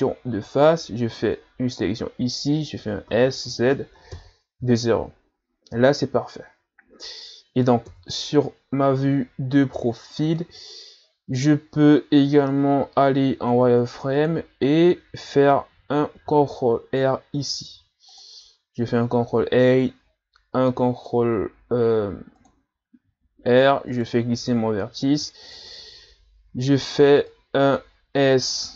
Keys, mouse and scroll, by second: 0.5 right click, 3.2 s, 7.9 KP_3, 9.5-10.7 scroll up 2, 12.3 z, 13.5 ctrl+Tab, 16.2 ctrl+r, 23.9 right click, 24.3 b, 27.0 b.